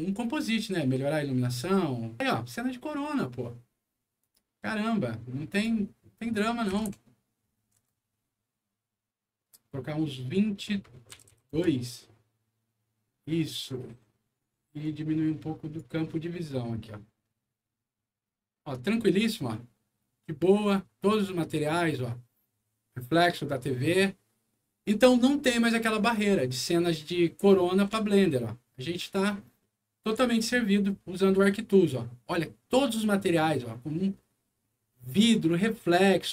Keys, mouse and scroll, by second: 1.5 scroll down 1, 4.2 click, 5.5 click, 6.7 KP_1, 7.0 KP_5, 7.8 Return, 10.2 click, 11.1 KP_2, 11.5 Return, 14.8 click, 17.2 middle click, 18.2-18.8 scroll up 3, 19.1-23.3 middle drag, 23.9 middle click, 25.4-26.4 scroll up 6, 26.8 middle click, 28.1 shift+middle click, 28.9 shift+middle click, 29.6 shift+middle click, 30.4-32.4 shift+middle drag, 33.4 middle click.